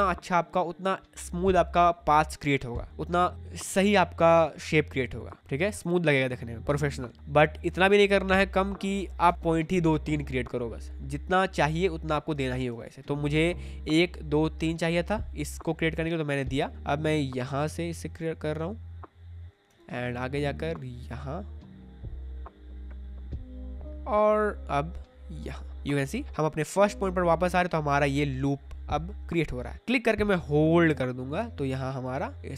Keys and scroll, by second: 7.1 Caps_Lock, 9.2 Caps_Lock, 12.3 space, 16.5 space, 19.6 space.